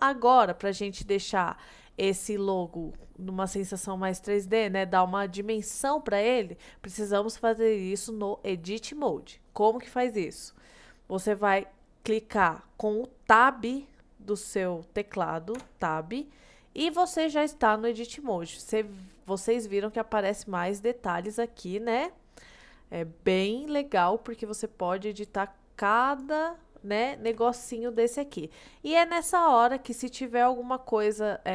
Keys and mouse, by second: 1.0-3.2 middle drag, 10.5 middle click, 15.7 Tab, 19.5 middle click, 21.6-22.7 middle drag, 23.0-24.5 middle drag, 24.6 middle click, 25.4 click, 27.4 g, 27.9-30.4 right drag.